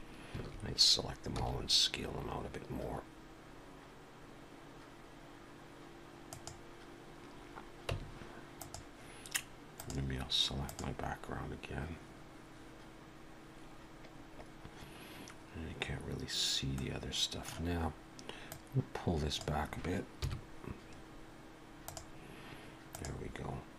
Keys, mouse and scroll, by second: 0.3 a, 1.4 s, 7.9 Tab, 8.6 click, 9.8 click, 10.7 click, 16.8 middle click, 18.5 click, 20.2 KP_1, 21.9 click, 22.9 click.